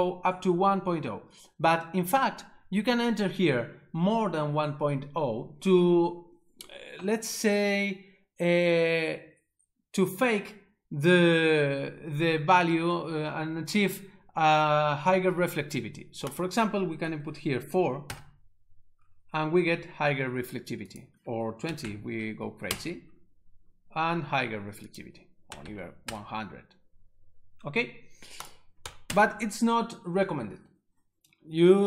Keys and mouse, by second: 16.3 click, 17.3 4, 18.1 Return, 20.9 click, 21.6 2, 21.8 0, 22.7 Return, 24.9 click, 25.5 1, 25.6 0, 25.7 0, 26.1 Return, 28.4 click, 28.8 1, 29.1 Return.